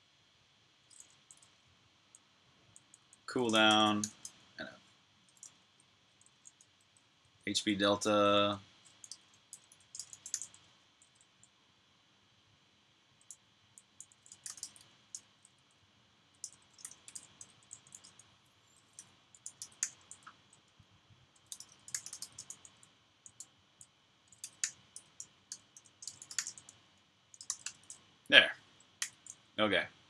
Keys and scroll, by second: 1.0-4.3 typing, 6.1-7.8 typing, 9.4 typing, 12.8-16.6 typing, 21.1-24.2 typing, 25.5-26.7 typing, 28.7-30.0 typing.